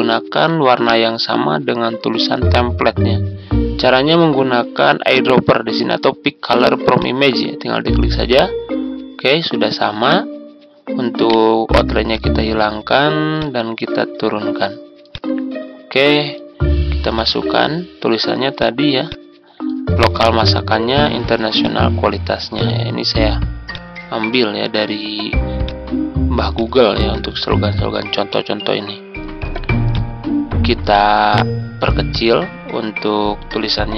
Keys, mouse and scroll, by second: 1.8-6.9 scroll up 1, 6.9-8.0 drag, 11.2 right click, 12.0-16.0 drag, 17.3 Tab, 18.5 click, 21.0 ctrl+c, 21.6 click, 24.0-25.0 drag, 27.0 ctrl+v, 29.9 click, 31.0 click.